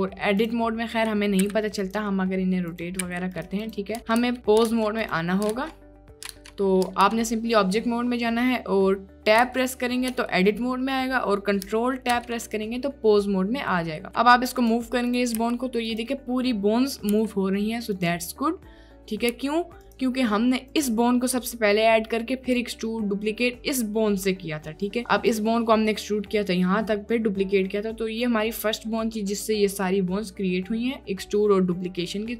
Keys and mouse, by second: 0.5 click, 1.5 r, 2.7 click, 3.1 r, 3.7 click, 4.2 ctrl+Tab, 4.9 ctrl+Tab, 5.0 drag, 5.7 ctrl+Tab, 6.5 ctrl+Tab, 9.5 Tab, 10.2 Tab, 12.1 Tab, 14.1 g, 15.4 g, 17.2 g, 19.4 g, 25.4-32.3 drag.